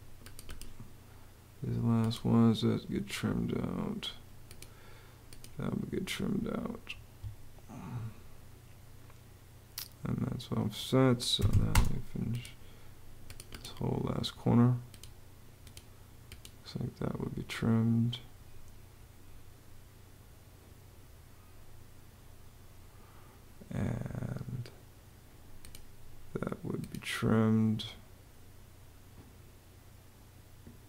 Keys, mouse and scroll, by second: 6.7 Escape, 10.9-11.8 typing.